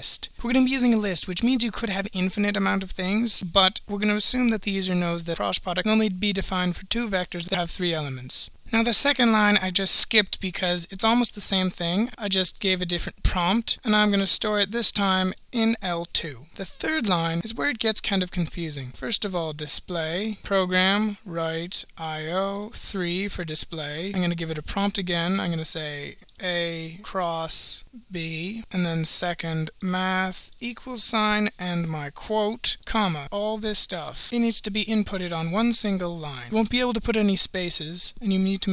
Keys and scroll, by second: 7.4-9.0 typing, 14.8 Return, 14.8 (, 14.8 *, 18.7-19.7 typing, 25.4-26.1 typing, 27.6-28.4 typing, 30.5 Return, 32.9 ,.